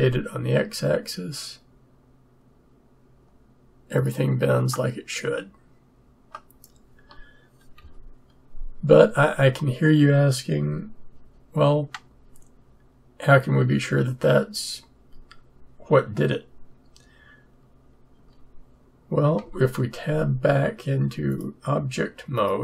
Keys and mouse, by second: 7.8 Tab, 18.1 Tab, 19.3 Tab, 21.3-22.6 drag.